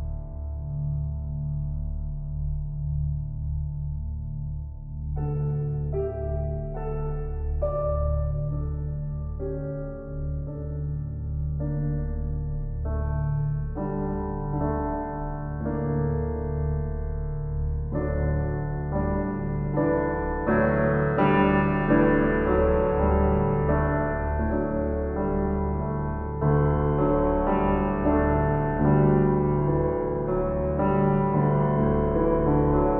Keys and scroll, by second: 1.5 ctrl+s, 7.4 shift+s, 24.9 F4.